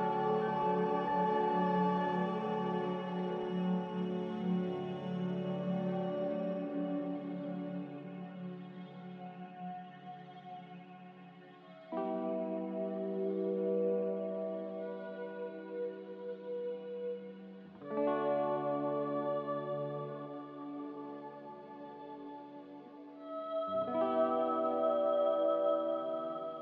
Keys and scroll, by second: 0.5 typing, 0.9 Return, 5.9 ctrl+c, 9.3 Escape, 11.3 ctrl+c, 12.8 ctrl+r, 22.7 n.